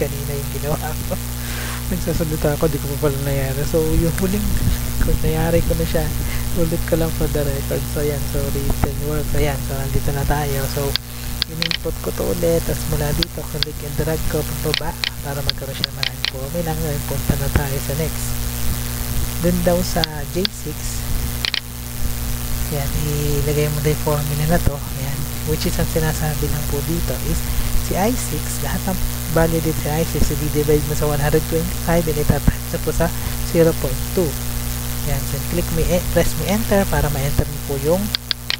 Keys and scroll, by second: 10.5 Tab, 17.7 Tab, 21.7 ctrl+c, 22.6 Tab, 24.0 F2, 24.8 ctrl+v, 25.5 BackSpace, 36.4 Return.